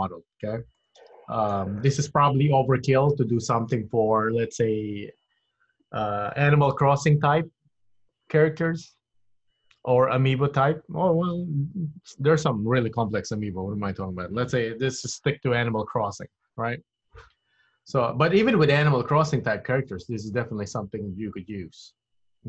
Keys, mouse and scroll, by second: 0.8 middle click, 2.0-2.5 scroll down 2.